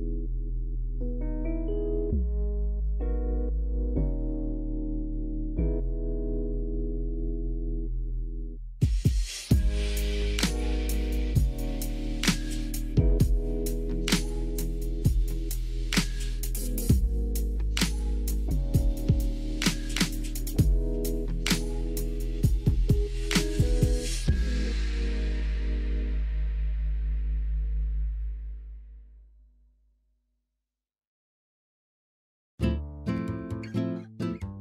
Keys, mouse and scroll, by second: 1.4 click, 1.7 click, 2.2 alt+z, 2.6 shift+middle click, 3.0 shift+middle click, 5.2 shift+a, 6.6 drag, 7.5 click, 10.2 click, 10.7 Tab, 11.3-12.4 drag, 13.9 s, 16.3 s, 17.8 click, 19.6 click, 20.0 s, 21.3 click, 26.2 shift+middle click, 26.7 s, 27.5 click, 30.4 s, 30.9 click, 32.0 s, 33.4 s, 33.9 click.